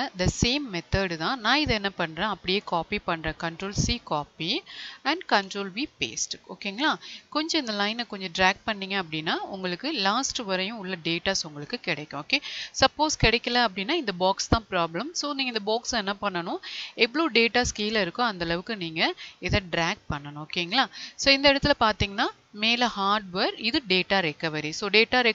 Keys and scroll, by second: 3.2 ctrl+c, 5.8 ctrl+v.